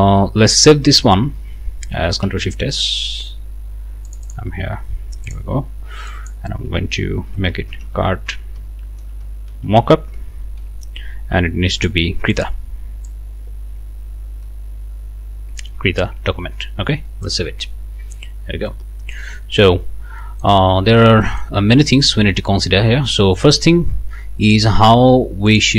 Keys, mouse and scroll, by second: 2.2 ctrl+shift+s, 4.0 click, 5.2 click, 6.1 click, 7.0-11.1 typing, 12.3 click, 13.1-15.8 drag, 17.2 click, 18.7 right click, 19.3-19.6 scroll up 2, 19.8 scroll down 2, 20.2 click, 20.9 scroll down 1, 21.2 middle click, 22.4 scroll up 1, 23.1 middle click, 24.5 click, 25.5 click.